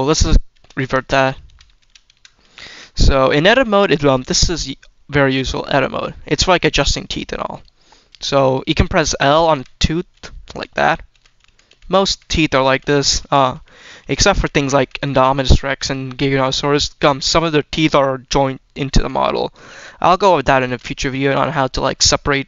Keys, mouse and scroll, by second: 0.4 ctrl+z, 0.7 ctrl+z, 1.4 ctrl+z, 1.7 ctrl+z, 2.4 shift+middle drag, 3.0 scroll up 1, 3.3 middle drag, 3.7 shift+middle click, 4.3-5.1 scroll up 2, 5.1 Tab, 5.6 shift+middle click, 7.1 click, 9.4-11.6 typing, 12.0 click, 12.3 click, 12.6 click, 12.9 click, 13.1 click, 13.7 click, 13.9 click, 14.2 click, 14.6 click, 14.9 click, 15.2 click, 15.4 click, 15.7 click, 16.9 click, 17.9-18.3 middle drag, 18.9 click, 19.5 click, 20.1-20.5 shift+middle drag.